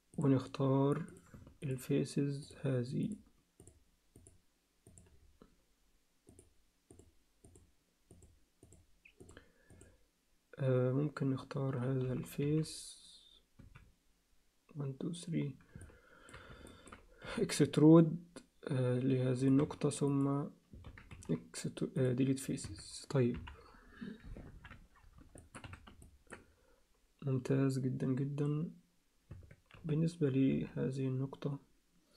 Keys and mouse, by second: 0.1-1.3 drag, 2.4 shift+click, 3.6 shift+click, 4.1 shift+click, 6.9 shift+click, 8.1 shift+click, 8.7 shift+click, 9.7 shift+click, 12.0 z, 12.4 z, 13.6 z, 15.8 alt+middle click, 16.7 ctrl+alt+middle click, 17.2 e, 19.6 x, 20.8 ctrl+z, 21.1 x, 22.7 Tab, 23.3 KP_1, 24.5 ctrl+KP_1, 25.4 shift+middle click, 25.6 z, 26.0 ctrl+alt+middle click, 29.3 Tab, 29.7 z, 30.5 z.